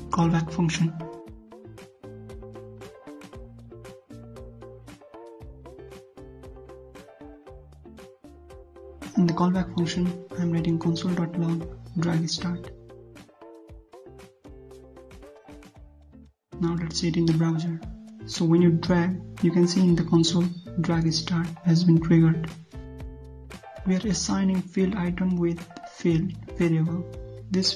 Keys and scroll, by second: 12.4 ctrl+z, 16.3 ctrl+s, 22.1 alt+Tab, 23.1 alt+Tab, 23.6 ctrl+c, 24.7 ctrl+v, 25.8 ctrl+z, 27.1 ctrl+c.